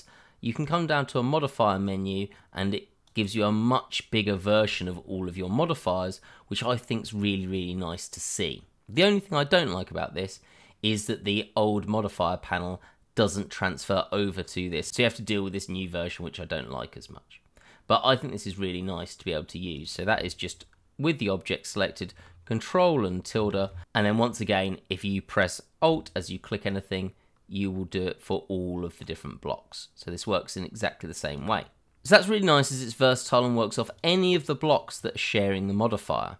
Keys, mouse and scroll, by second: 0.5 click, 5.1-5.9 scroll down 1, 5.9-7.9 scroll up 1, 9.2 click, 14.8 click, 18.6-19.7 scroll down 1, 19.7 click, 23.3 ctrl+`, 26.7 click, 28.8 click, 33.9 click, 34.4 double click, 36.0-36.3 scroll down 1.